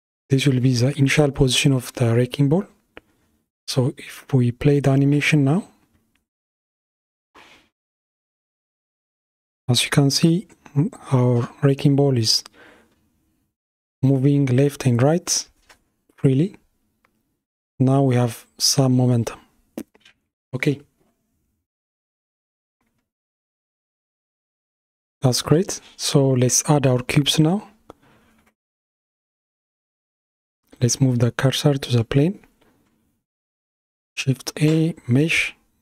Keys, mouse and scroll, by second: 2.5-4.1 middle drag, 4.1 click, 5.3 space, 22.9 space, 24.4-25.1 drag, 25.6-27.2 middle drag, 27.2 shift+s, 34.3 shift+a.